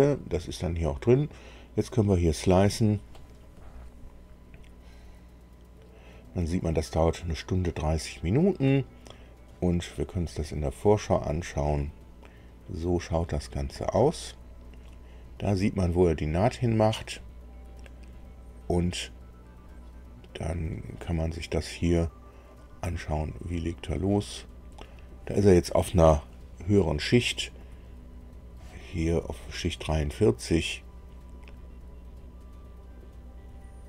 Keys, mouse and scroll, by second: 2.5 click, 10.6 click, 13.0 middle click, 13.8-15.7 right drag, 16.1-16.9 scroll up 1, 17.0-21.1 right drag, 22.5 click.